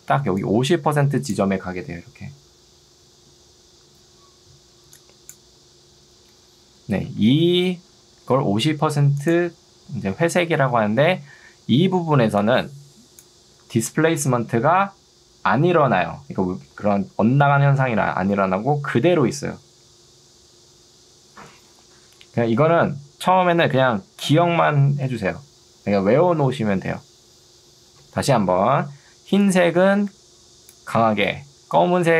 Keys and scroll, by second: 7.1 Escape, 11.9 ctrl+2, 21.9 Escape, 27.9 ctrl+2.